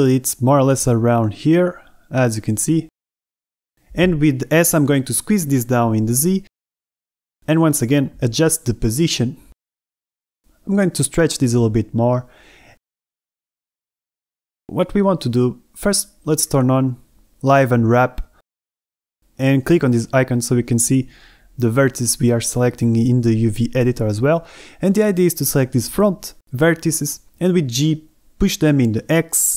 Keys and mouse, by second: 0.7 click, 1.0 middle click, 1.2 g, 1.4 x, 1.9 click, 2.1 middle click, 2.5 middle click, 2.9 shift+middle click, 3.6 shift+middle click, 4.2 g, 4.4 z, 4.7 click, 5.3 middle click, 5.7 s, 5.8 z, 6.9 click, 7.4 middle click, 8.4 s, 8.4 y, 8.9 click, 8.9 g, 9.1 z, 10.4 Tab, 11.4 click, 11.9-13.5 typing, 14.9 middle click, 26.0 a, 26.7 b, 28.4 KP_1.